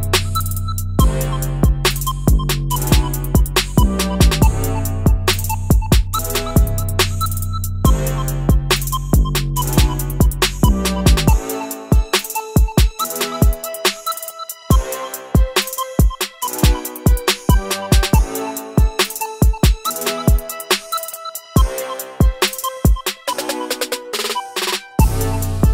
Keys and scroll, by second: 12.9 Delete, 20.9-24.8 typing.